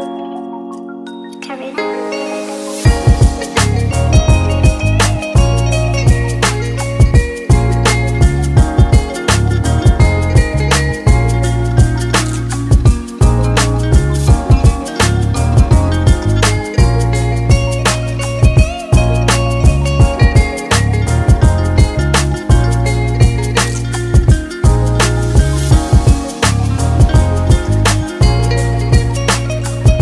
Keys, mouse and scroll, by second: 1.2 click, 1.7 click, 3.0 click, 4.5 ctrl+z, 5.1 KP_1, 6.1 scroll up 1, 6.7 click, 7.1 click, 8.3 ctrl+KP_1, 10.3 click, 10.8 click, 12.6 click, 12.9 click, 14.8 click, 15.4 click, 16.2 Tab, 16.6 middle click, 19.9 click, 22.5-23.1 scroll down 2, 23.1-23.5 scroll down 1, 23.5 click, 24.7 middle click, 27.7 click, 28.4-29.1 scroll up 4, 29.1 scroll up 2, 29.4 click.